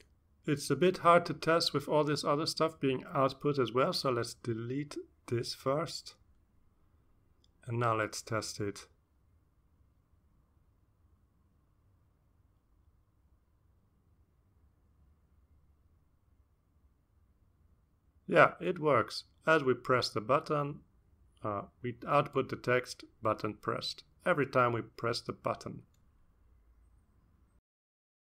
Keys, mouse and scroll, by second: 0.9 click, 1.4 scroll down 1, 2.1-3.4 drag, 4.1 BackSpace, 5.6 BackSpace, 6.2 BackSpace, 7.9 ctrl+s, 9.5 click, 11.7-16.9 drag, 17.2 click, 18.3 click, 21.7-23.0 drag, 23.5 click, 24.9 click, 25.6 click, 26.1 click, 27.2-28.2 drag.